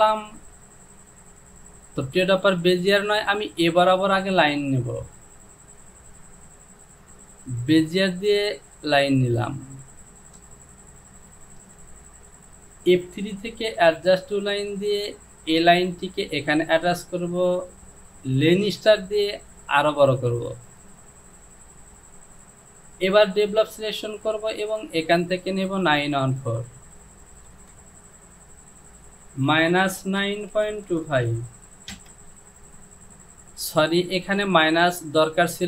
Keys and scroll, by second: 29.5 KP_Subtract, 30.1 KP_9, 30.6 KP_Decimal, 30.9 KP_2, 31.2 KP_5, 32.0 Return.